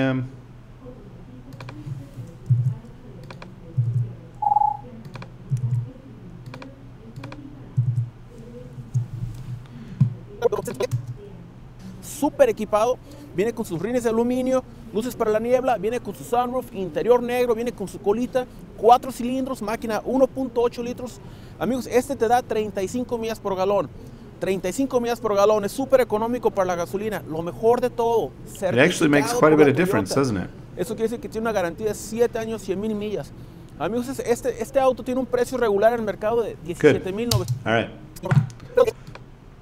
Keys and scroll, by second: 2.5 ., 3.7 ., 5.5 ., 7.7 ., 10.9 space, 37.3 space.